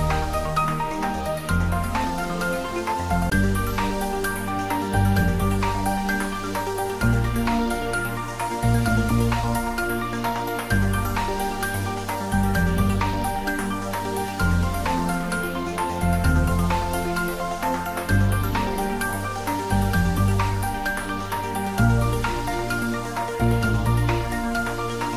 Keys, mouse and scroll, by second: 2.0 click, 3.6 shift+d, 6.2 r, 7.1 click, 7.8 g, 13.1 click, 14.3 shift+d, 17.1 r, 23.1 click, 24.1 g.